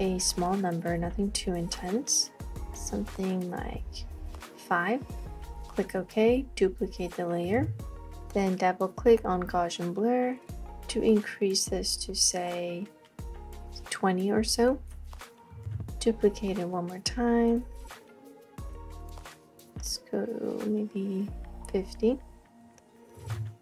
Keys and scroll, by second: 7.6 super+j, 15.7 super+j, 23.3 super+j.